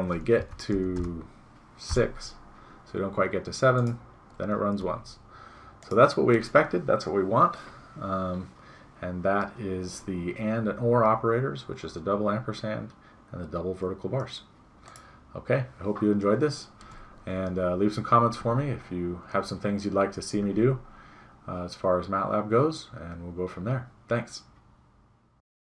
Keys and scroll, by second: 0.4 Right, 0.7 BackSpace, 4.7 BackSpace.